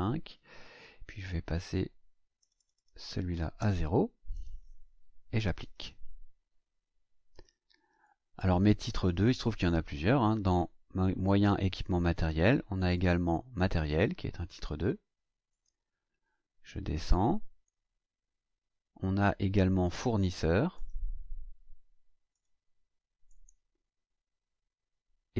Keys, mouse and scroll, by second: 2.3 click, 3.5 KP_0, 4.3 click, 5.5 click, 7.4 click, 12.9 click, 14.5 click, 15.5 click, 16.3 scroll down 1, 20.7 click, 22.3 click, 23.2 click.